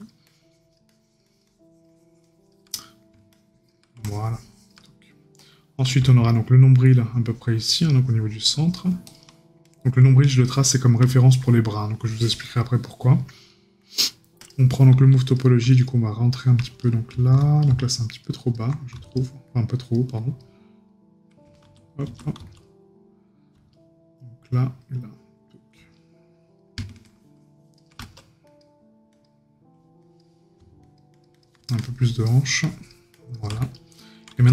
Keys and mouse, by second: 2.8 right click, 4.8 right click, 10.7 right click.